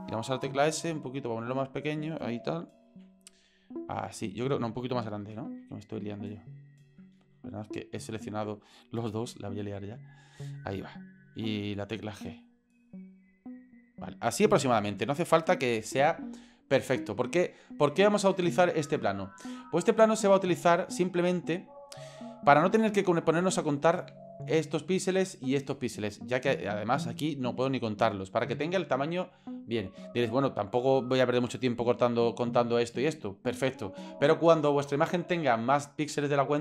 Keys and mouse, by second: 0.7 s, 2.9 g, 5.1 a, 5.6 s, 7.2 ctrl+z, 8.0 right click, 9.3 s, 12.3 g, 14.9 g, 19.0 ctrl+click, 20.2 middle click, 20.7-21.4 ctrl+middle drag, 21.7-22.1 ctrl+middle drag, 22.5-22.8 shift+drag, 26.4-26.7 shift+drag.